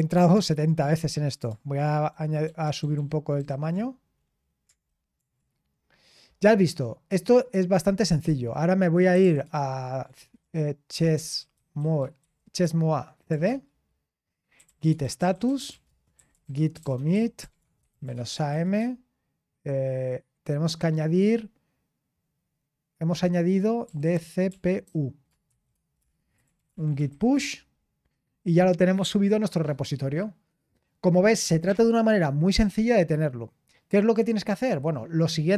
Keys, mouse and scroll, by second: 0.0-0.3 typing, 0.3 Return, 7.2 ctrl+click, 7.6-9.4 typing, 8.0 click, 8.5 click, 9.2-11.5 ctrl+*, 11.2-12.6 typing, 14.5 ctrl+l, 15.0-18.9 typing, 23.5-27.5 typing, 25.9 Return.